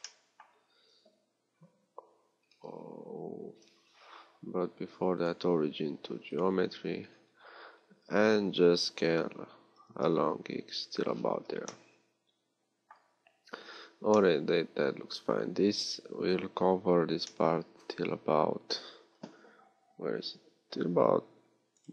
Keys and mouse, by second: 3.9 Tab, 8.0 z.